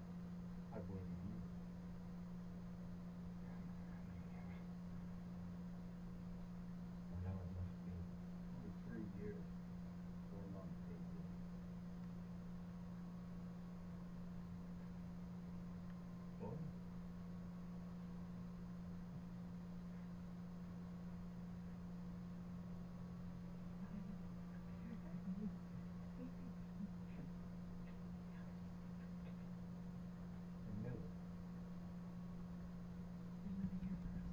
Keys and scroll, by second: 20.9 Return.